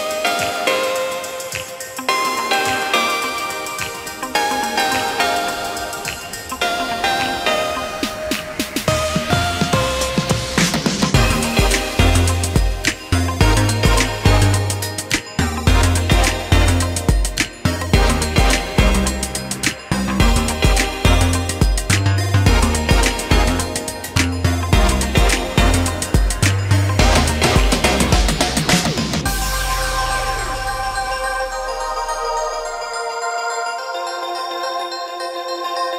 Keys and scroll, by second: 0.1 shift+space, 1.7 p, 5.3 k, 8.8 space, 9.6 Escape, 11.4 ctrl+g, 18.2 space, 20.6 p, 21.8 space, 23.4 ctrl+g, 24.3 m, 30.4 /, 31.7 4, 31.8 Return, 33.5 space, 34.9 Delete.